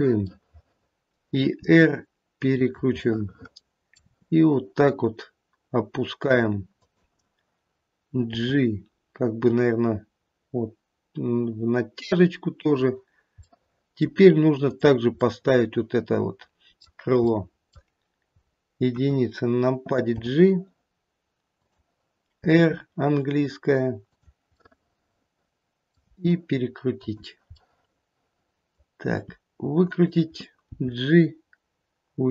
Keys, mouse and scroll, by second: 0.2 middle click, 1.7 r, 2.9 middle click, 4.0 r, 8.3 g, 13.4 middle click, 13.9 middle click, 14.6 click, 15.4 middle click, 16.6 middle click, 17.3 middle click, 18.8 KP_1, 20.2 g, 22.4 r, 24.6 middle click, 26.0 r, 27.6 middle click, 29.1 r, 30.7 g.